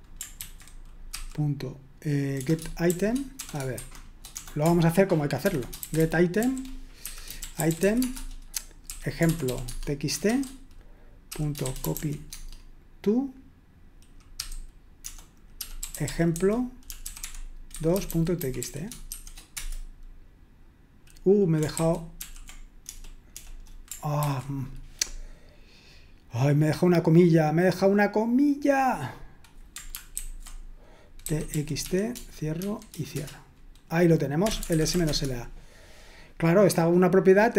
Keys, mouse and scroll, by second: 0.4 ctrl+c, 1.1 ., 2.4-12.5 typing, 15.9-19.6 typing, 21.8 ctrl+c, 22.2 ctrl+p, 22.9 BackSpace, 23.3 BackSpace, 24.2 ctrl+c, 27.1-29.6 drag, 30.2 ctrl+alt+v, 31.0-33.2 typing, 34.9 typing.